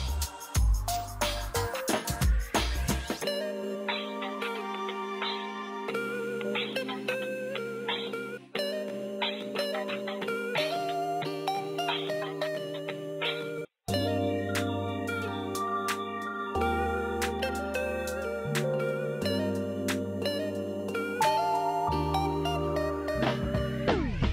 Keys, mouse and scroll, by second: 0.1 ctrl+r, 0.7 click, 1.1 ctrl+r, 1.5 click, 3.3 F4, 4.6 click, 5.3 F2, 6.5-9.8 drag, 10.5-11.4 typing, 11.9 click, 13.6-14.5 typing, 14.9 click, 16.5-17.4 typing, 18.5-20.2 drag, 20.9-21.8 typing, 21.9 click, 24.2-24.3 typing.